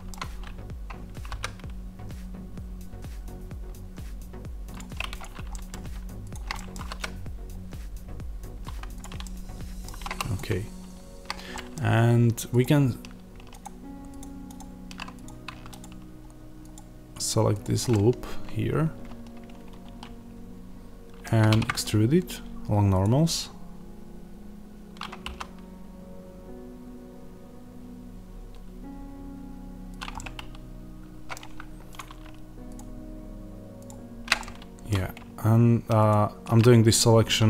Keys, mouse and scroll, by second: 1.1 s, 5.1 click, 5.4 middle click, 6.2 shift+click, 6.4 middle click, 6.7 s, 8.9 click, 9.1 middle click, 10.0 middle click, 10.0 3, 10.2-11.4 drag, 11.4-12.5 middle drag, 12.5 ctrl+click, 14.1 ctrl+click, 15.7 ctrl+click, 17.8-29.9 middle drag, 22.9 alt+e, 29.9 click, 30.1-31.9 middle drag, 31.9 click, 32.7 ctrl+click, 34.3-36.0 middle drag, 36.0 ctrl+click.